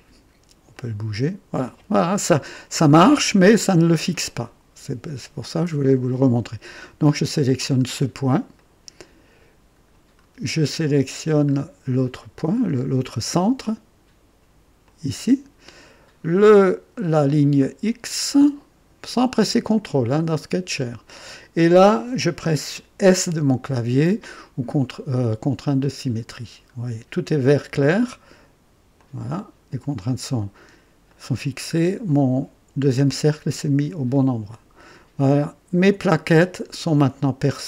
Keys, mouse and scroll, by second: 0.7-1.7 drag, 2.3-2.6 scroll down 2, 3.9 scroll up 2, 5.8 click, 7.2 right click, 7.9-8.3 scroll down 1, 8.5-10.0 right drag, 10.1 scroll down 1, 10.7-11.4 right drag, 11.4 scroll up 1, 12.0-12.6 right drag, 12.7 scroll up 2, 14.8 click, 15.7-16.3 right drag, 16.9-17.2 scroll down 2, 17.6-18.4 right drag, 19.8 click, 25.8 click, 26.8 scroll down 1, 28.9 click, 30.4-30.7 scroll down 1, 31.1 right click, 31.7 scroll up 1, 34.4 click, 36.0-36.5 scroll up 2, 36.9 click.